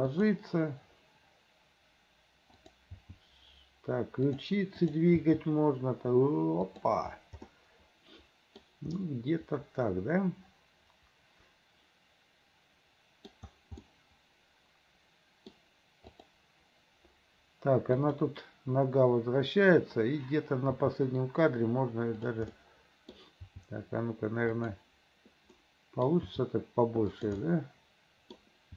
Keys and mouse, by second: 2.7 click, 3.0 g, 5.0 click, 5.3 g, 7.7-8.8 middle drag, 9.1-13.5 middle drag, 14.2-15.8 drag, 18.1 click, 20.8 g, 22.7 click, 23.5 g, 25.8 click, 26.6 g, 27.7 click.